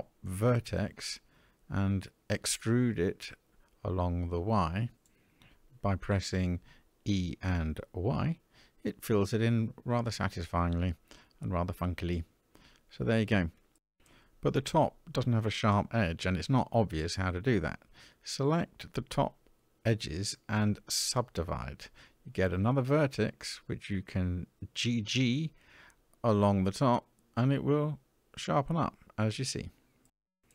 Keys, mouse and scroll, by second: 1.8 click, 2.9 click, 3.3 middle click, 5.9 e, 12.6 middle click, 14.8 shift+middle click, 15.5-16.1 scroll up 3, 16.1 middle click, 18.3 shift+click, 19.2-21.3 right drag, 22.1 click, 24.1 g, 28.9 middle click, 29.7-30.4 scroll down 3, 30.4-30.5 middle drag.